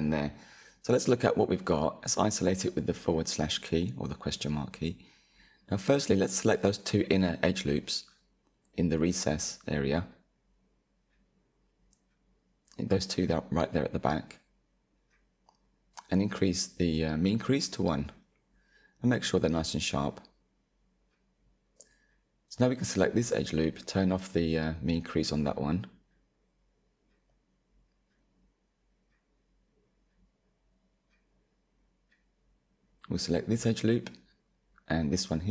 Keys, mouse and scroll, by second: 0.7 /, 1.5 Tab, 2.1-4.1 middle drag, 4.1-4.5 scroll up 3, 4.5-7.1 shift+middle drag, 7.1-8.3 drag, 9.7 alt+shift+click, 10.8 z, 11.8-12.1 scroll down 1, 12.1-14.0 middle drag, 14.0 z, 14.9 middle click, 15.9-17.3 drag, 17.6-21.5 middle drag, 21.5 alt+click, 22.7-25.7 drag, 26.7 ctrl+Delete, 28.1-31.3 shift+middle drag, 31.3 alt+click, 34.2 alt+shift+click.